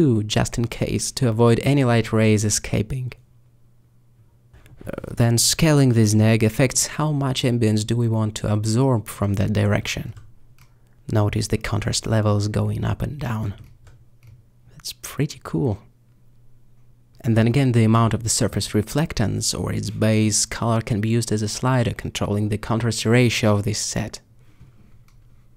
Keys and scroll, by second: 6.6 ctrl+alt+s.